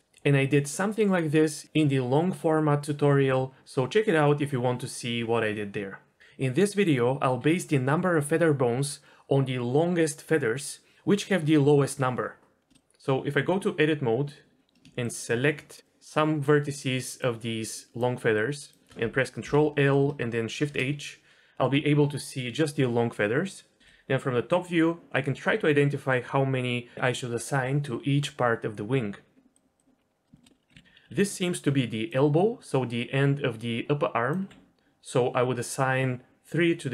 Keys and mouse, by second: 13.2 Tab, 14.5 click, 15.1 shift+click, 15.7 shift+click, 16.3 shift+click, 16.8 shift+click, 17.7 shift+click, 18.3 shift+click, 19.4 ctrl+l, 20.5 shift+h, 23.8 KP_7, 29.5 click, 30.3 shift+click, 30.6 d, 31.0 ctrl+z, 31.0 d, 31.5 d, 31.6-32.5 d, 33.1-34.2 drag, 34.4 d.